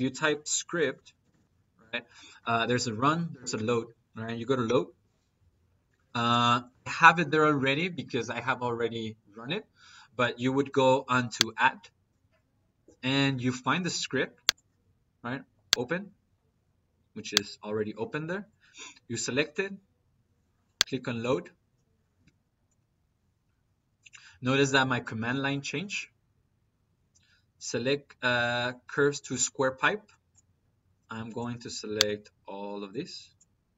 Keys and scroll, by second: 0.0-1.4 typing, 0.1 Escape, 2.2 Down, 3.2 Down, 4.5 Return.